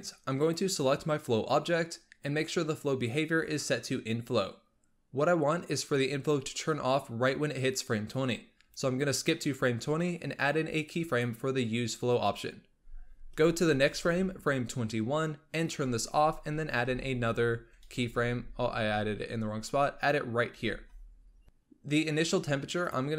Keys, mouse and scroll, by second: 0.3 click, 8.0-11.0 drag, 13.8 Right, 15.4 click, 17.9 ctrl+z, 22.8-23.1 drag.